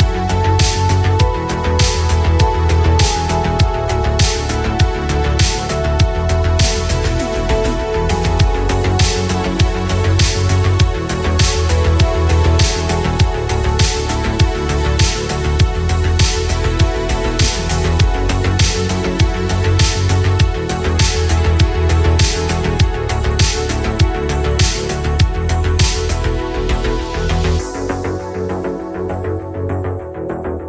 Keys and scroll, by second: 2.6 ctrl+z.